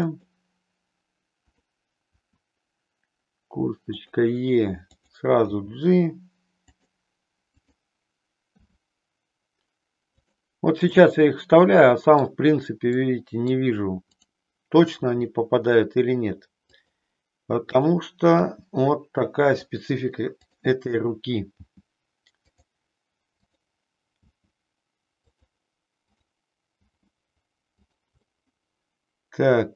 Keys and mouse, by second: 1.5 click, 2.2 e, 4.0 click, 4.9 click, 5.6 g, 7.5 click, 10.2 click, 11.0-12.3 middle drag, 12.9 middle click, 14.0 click, 15.0 e, 16.9 click, 17.7 click, 18.5 g, 20.3 click, 23.3 click, 24.2 g, 26.0 click, 28.0 click, 28.2-29.7 middle drag.